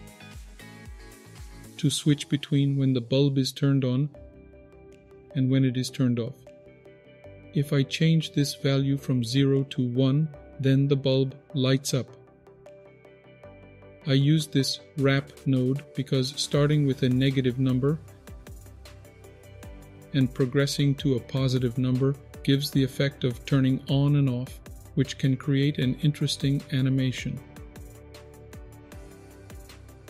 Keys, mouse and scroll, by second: 0.6-1.1 scroll down 3, 1.1 middle click, 3.8-4.8 middle drag, 4.8-5.3 scroll down 2, 5.0 middle click, 6.5 middle click, 7.1-8.4 scroll up 4, 8.4-10.2 drag, 8.4-9.6 scroll up 1, 11.7 click, 13.5 click, 21.5-30.0 drag.